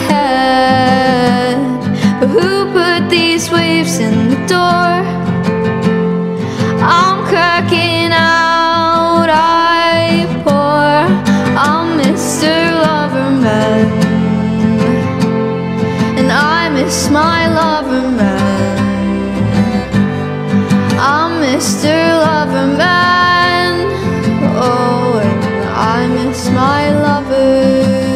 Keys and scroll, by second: 5.5 r, 10.4 ctrl+z, 23.8 Return.